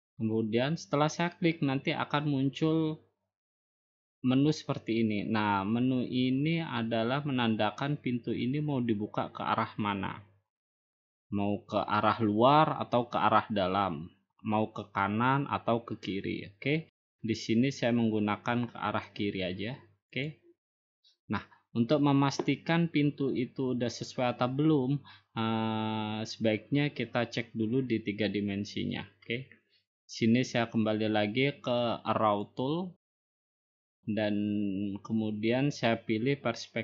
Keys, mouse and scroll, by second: 1.0-2.1 drag, 21.7-22.8 drag, 34.0-35.1 drag.